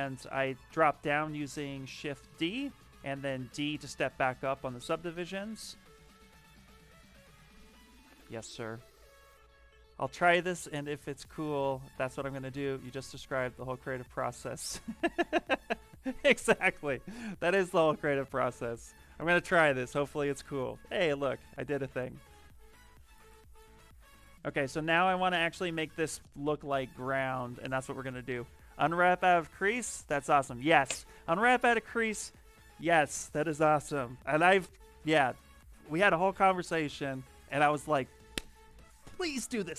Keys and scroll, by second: 0.2 shift+d, 0.3 shift+d, 2.5-3.4 typing, 4.9-7.0 typing, 22.3 b, 23.9 shift+f.